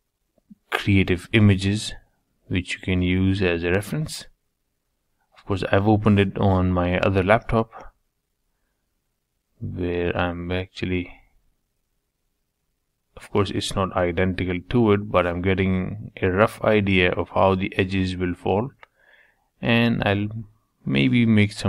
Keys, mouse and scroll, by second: 0.4 g, 3.2 3, 3.6 middle click, 4.1 click, 4.4-5.4 middle drag, 5.4 e, 9.3 3, 9.7 2, 9.8 middle click, 10.5 click, 11.0 g, 13.6 middle click, 14.4 click, 15.5 g, 17.0-20.6 middle drag, 20.6 ctrl+r.